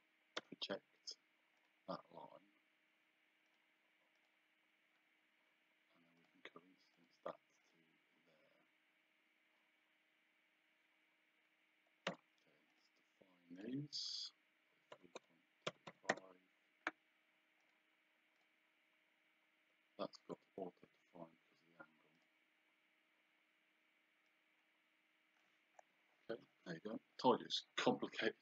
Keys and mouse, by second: 1.6 click, 3.5 click, 6.2 click, 12.7 click, 15.0 KP_3, 17.6 click, 20.2 Return, 22.2 click, 24.3 click.